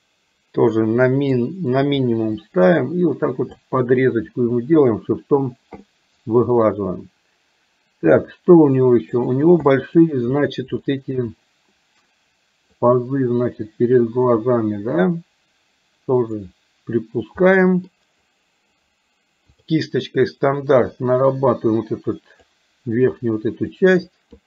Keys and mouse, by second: 1.7 click, 2.4 click, 3.2 click, 4.7 shift+click, 5.9-9.3 middle drag, 9.7 middle click, 10.9 shift+middle click, 12.8-16.4 drag, 17.5 middle click, 19.7 click, 21.0-22.5 drag, 23.8 click.